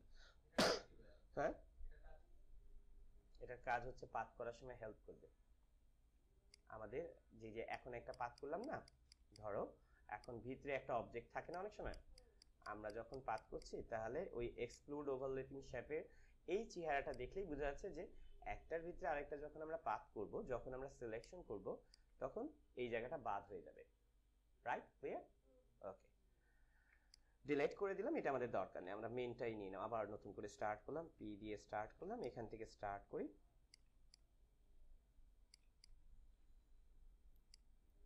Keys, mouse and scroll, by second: 6.2 space, 6.4 click, 6.8 space, 7.5 click, 9.3 click, 17.0 click, 21.1 click, 21.8 click, 25.9 ctrl+click, 26.5 z, 27.0 click, 27.8 Delete, 30.7 p, 31.2 ctrl+=, 32.0 space, 32.1 click, 32.6 space, 33.6 click, 34.3 space, 35.5 click, 35.7 space, 36.2 space, 37.4-38.0 drag.